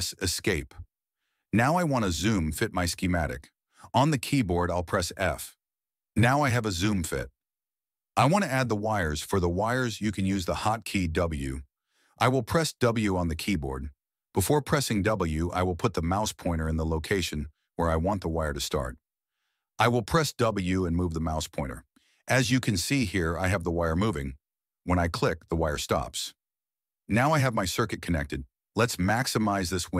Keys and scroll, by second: 6.1 f, 10.7 w, 13.9 w, 14.8 w, 18.5 w, 19.9 w, 20.8 w, 21.4 Escape, 22.7 w.